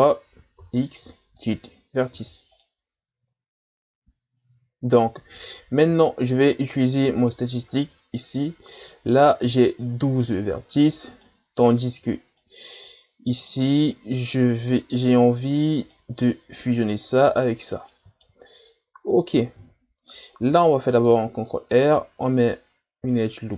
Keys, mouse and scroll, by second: 0.6 x, 2.2 z, 2.6-5.6 middle drag, 6.7 alt+right click, 11.3-15.5 middle drag, 15.5 scroll down 1, 15.9-18.7 middle drag, 18.7-19.1 shift+scroll down 3, 19.1-20.5 middle drag, 20.5 ctrl+r.